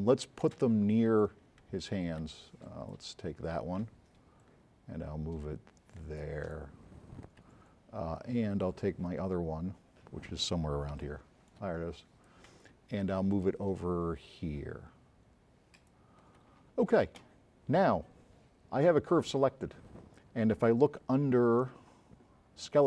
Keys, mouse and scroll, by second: 0.6 space, 0.9-1.3 drag, 1.6 v, 4.0 v, 11.0 s, 11.0 right click, 12.1 click, 12.6-14.4 drag, 12.6 v.